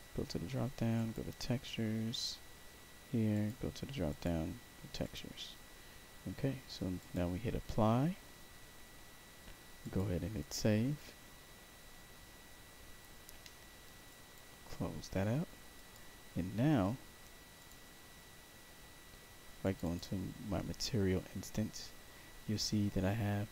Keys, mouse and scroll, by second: 0.9 click, 2.0 click, 3.2 click, 4.0 click, 4.9 click, 6.9 click, 9.7 click, 14.0 click, 15.7 click, 17.5 click, 19.5 click, 19.7 click.